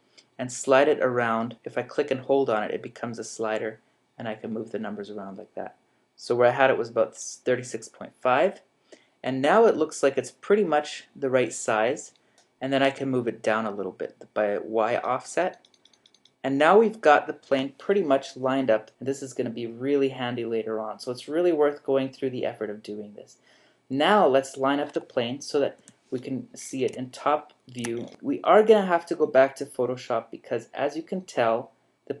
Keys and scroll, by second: 25.8 7, 28.2 shift+g.